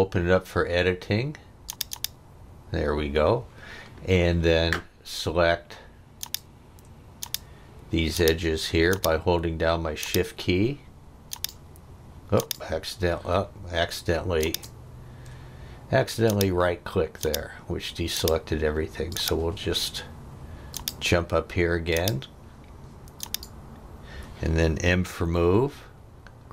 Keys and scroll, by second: 25.1 m.